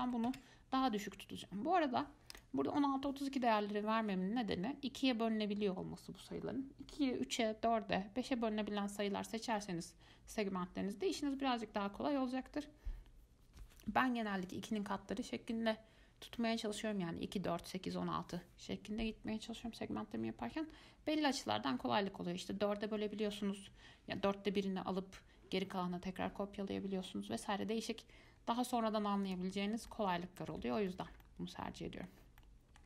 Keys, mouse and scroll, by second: 2.5-5.5 drag, 30.1-32.4 middle drag, 32.4 scroll down 1, 32.6-32.8 middle drag.